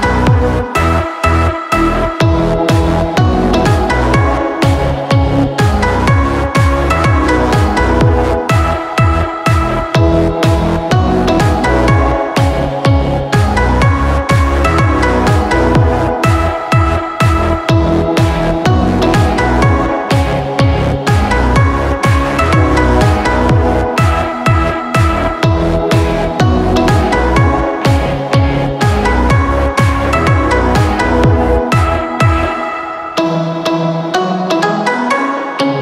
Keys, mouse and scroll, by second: 18.9-30.1 drag.